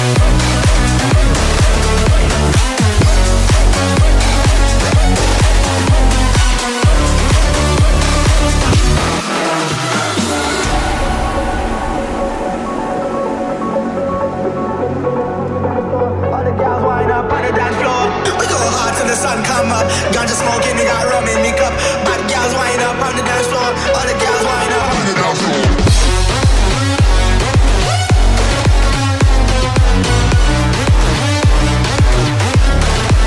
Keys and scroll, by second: 5.6 space, 10.7 space, 18.3 space, 20.6 ctrl+z, 23.0 space, 33.0 space.